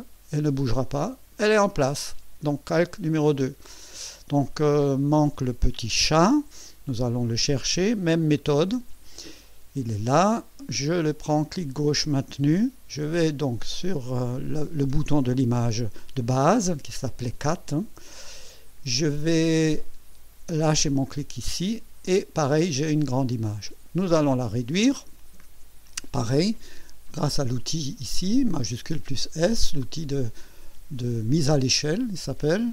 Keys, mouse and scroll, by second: 8.3 click, 9.4 click, 10.9-21.1 drag, 27.1 click.